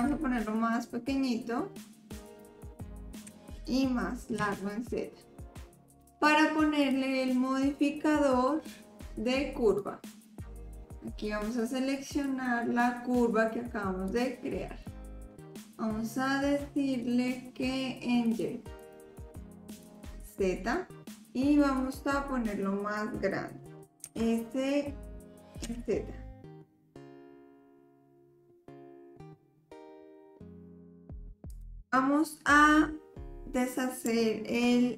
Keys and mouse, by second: 0.0 s, 3.3 s, 8.9-10.2 drag, 12.1 click, 16.9-18.4 drag, 18.8-19.9 drag, 21.8 click, 24.0 s.